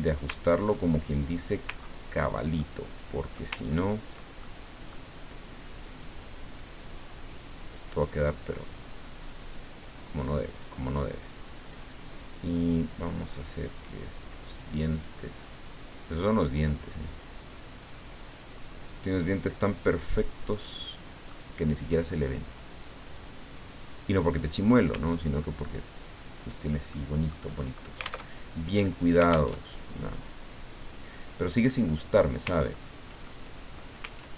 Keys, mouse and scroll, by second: 0.3 ctrl+middle click, 1.8 ctrl+scroll down 2, 2.5 ctrl+middle click, 3.6-3.9 ctrl+scroll up 2, 4.4 ctrl+middle click, 6.6-8.1 drag, 8.7 click, 10.5 click, 11.5 click, 13.4-14.7 drag, 15.4 click, 15.8-17.8 drag, 18.9-20.8 drag, 20.8 middle click, 23.1 click, 23.6-24.8 drag, 24.9-25.4 ctrl+scroll down 2, 25.5-26.2 ctrl+scroll down 4, 26.9 ctrl+click, 28.3 alt+Tab, 29.6 alt+Tab, 32.6 ctrl+scroll up 2, 33.2 ctrl+middle click.